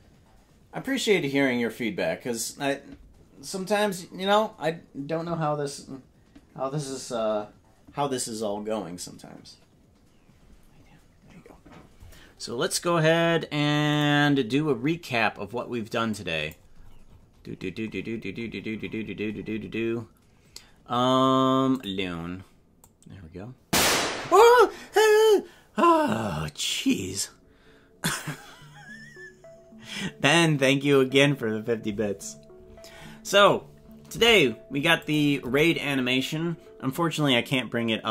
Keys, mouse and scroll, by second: 35.5 KP_0.